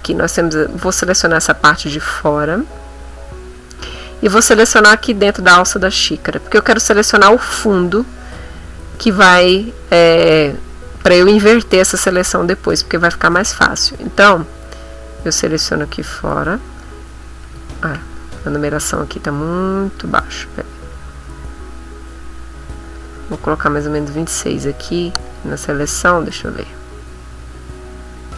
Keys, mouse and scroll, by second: 14.0 click, 17.9 ctrl+shift+a, 19.4 click, 21.8-24.4 drag, 25.2 click.